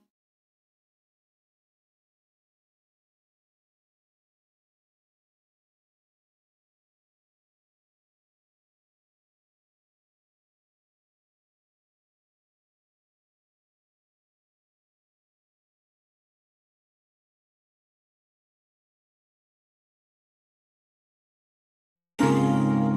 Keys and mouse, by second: 1.1-6.8 middle drag, 6.8-8.3 drag, 10.1-11.3 drag, 12.0-15.0 drag, 18.6-21.5 middle drag, 21.5 ctrl+KP_1, 22.8-22.9 ctrl+middle drag.